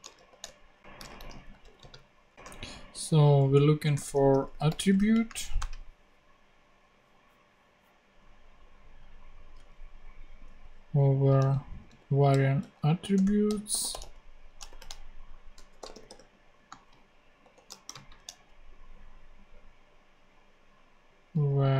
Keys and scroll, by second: 0.0-2.4 typing, 0.4 shift+Return, 3.7-5.9 typing, 11.3 super+c, 11.8 super+v, 12.2 super+., 12.5-17.9 typing, 13.1 Return, 21.3 a.